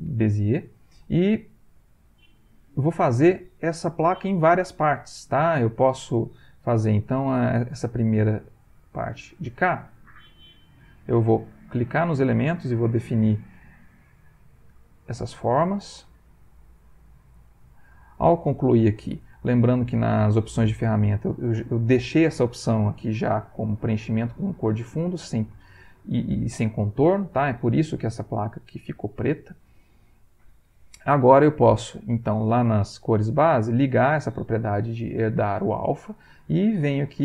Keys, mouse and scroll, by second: 1.3 middle click, 2.0-3.1 ctrl+middle drag, 8.7 click, 10.6 click, 12.0 click, 13.0 click, 14.3 click, 15.6 click, 16.5 click, 17.6 click, 31.4 click, 33.9 click.